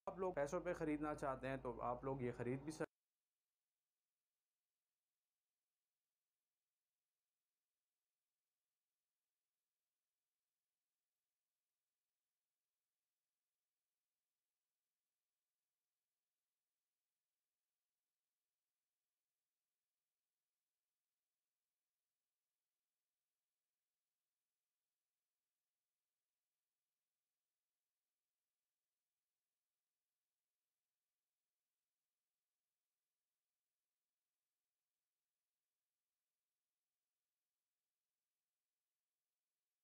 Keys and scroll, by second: 0.4 space, 3.2 ctrl+s, 4.6 ctrl+m.